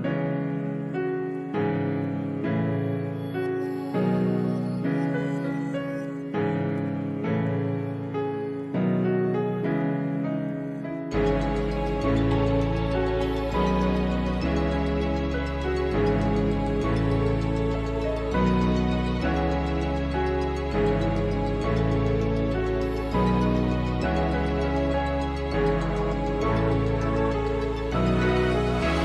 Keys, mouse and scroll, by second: 0.4 middle click, 2.2 Delete, 4.0 z, 5.8 middle click, 7.6 ctrl+z, 9.3 a, 11.1-11.6 scroll up 1, 12.9-14.7 middle drag, 14.7 a, 16.6-20.4 shift+middle drag, 20.4-22.3 drag, 24.2 shift+click, 26.1-28.0 shift+drag, 28.0-29.0 middle drag.